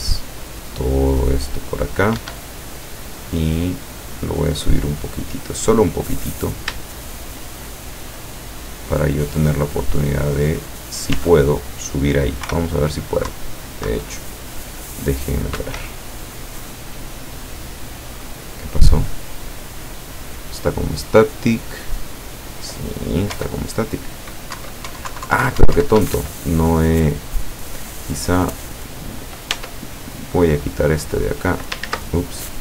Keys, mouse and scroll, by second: 2.3 Escape, 3.1 click, 3.8-6.1 drag, 6.6 shift+right click, 7.0 shift+right click, 7.4 shift+right click, 7.8 shift+right click, 9.4-10.4 drag, 11.2 Tab, 12.5 p, 13.3 Right, 15.7 Escape, 23.4 p, 24.7 Up, 25.2 Down, 25.7 Up, 26.0 Escape, 28.8 right click, 29.6 Tab, 30.1 right click, 30.8 click, 31.9 ctrl+z, 32.5-32.6 drag.